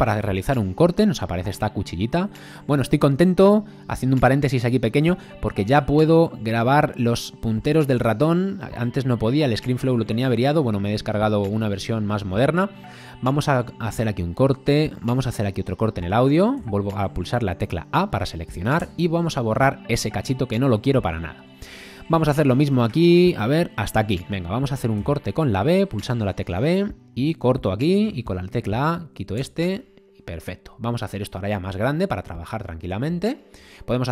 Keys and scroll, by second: 16.6 a, 18.8 BackSpace, 25.0 b, 28.1 a, 29.4 BackSpace.